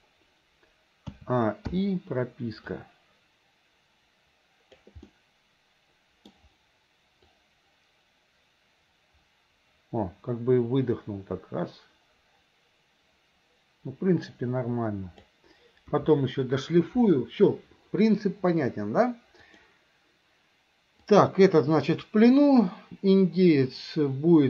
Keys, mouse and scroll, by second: 1.2 a, 1.7 i, 2.8-4.9 drag, 5.1-6.3 middle drag, 7.4-15.4 drag, 16.0 KP_1, 19.5 click, 21.1 click.